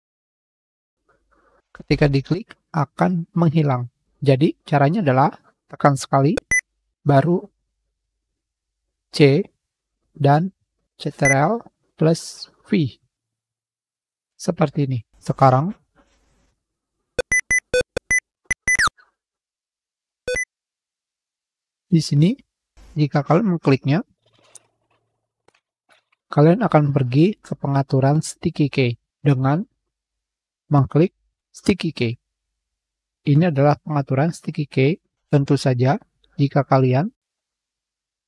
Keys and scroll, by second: 7.7 ctrl+r, 7.8 ctrl+c, 8.1 ctrl+f, 37.3 Page_Up, 37.3 Page_Down, 37.4 Pause, 37.7 Print.